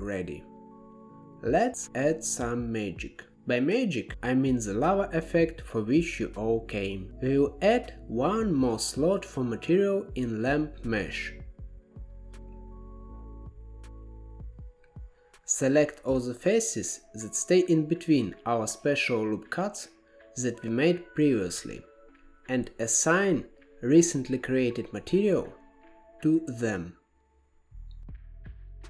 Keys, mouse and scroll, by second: 1.4 click, 2.7-5.9 drag, 7.0-8.0 drag, 9.8-13.7 drag, 15.2 click, 15.9 Tab, 16.9 KP_1, 17.8-18.4 scroll up 6, 18.4 shift+middle click, 18.8-20.0 scroll up 3, 20.0 alt+z, 21.9 3, 22.4 click, 25.7-27.5 drag, 27.5 KP_0, 28.2 click.